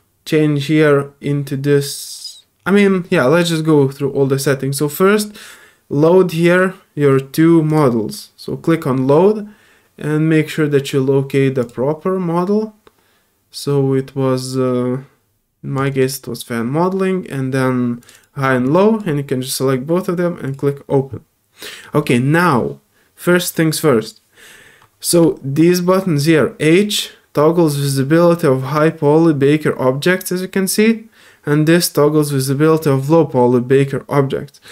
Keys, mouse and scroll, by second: 2.6 scroll up 1, 7.7 click, 11.6 click, 15.7 click, 18.0 click, 18.6-19.0 drag, 20.4 click.